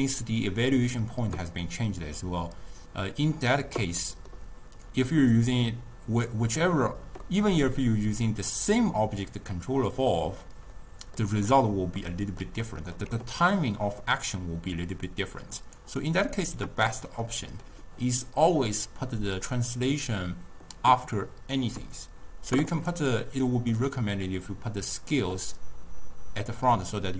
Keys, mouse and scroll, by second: 2.4 click, 4.1-5.0 middle drag, 5.0 click, 5.5-7.4 drag, 7.4-14.9 middle drag, 14.9-15.8 drag, 16.1-17.4 drag, 17.4-20.4 middle drag, 22.9 click, 26.6-27.1 drag.